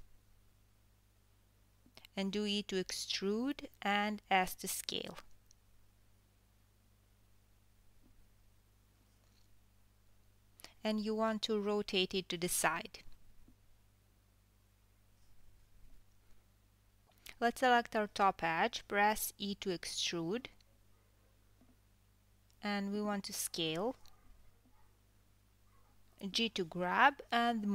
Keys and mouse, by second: 4.6 KP_3, 6.3 KP_1, 8.0 e, 10.6 s, 13.0 KP_7, 13.5 r, 16.8 2, 17.2 click, 18.8 KP_1, 21.6 e, 24.3 KP_7, 25.5 s, 27.1 g.